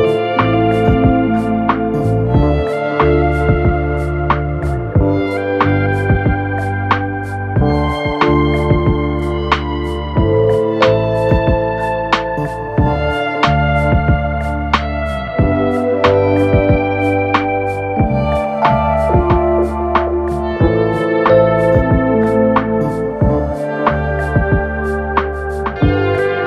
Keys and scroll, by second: 10.6 4, 11.4 2, 15.1 4, 16.6 F9, 17.5 2, 23.2 ctrl+d, 23.3 Escape, 23.7 ctrl+z, 25.9 ctrl+d, 26.1 Escape.